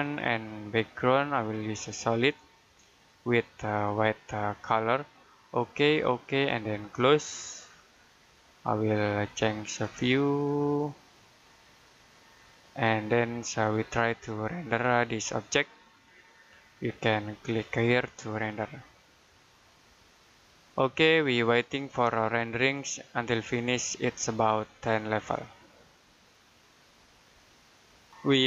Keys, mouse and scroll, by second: 8.2 middle click, 8.6-9.4 scroll up 1, 9.4 middle click, 9.9 middle click, 13.0-13.4 scroll up 1, 13.4 middle click, 17.5 click.